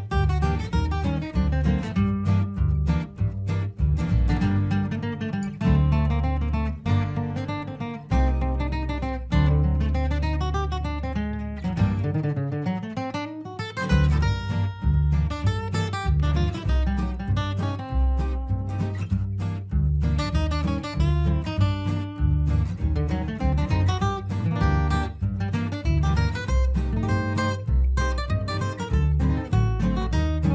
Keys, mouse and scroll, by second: 2.5 right click, 3.8 F12, 4.9 click, 9.9 click, 10.2 ctrl+r, 11.1 click, 11.3 r, 12.0 ctrl+r, 12.4 shift+click, 12.8 c, 13.8 right click, 15.0 shift+click, 15.1 shift+c, 15.5 shift+click, 16.0 Escape, 16.4 ctrl+r, 17.5 click, 17.9 F2, 18.1 click, 18.7 Escape, 19.3-22.4 drag, 22.4 F3, 23.4 F4, 23.8 F2, 24.0 click, 24.9 Escape, 25.4-28.0 drag, 28.2 shift+c, 28.3-30.5 shift+drag.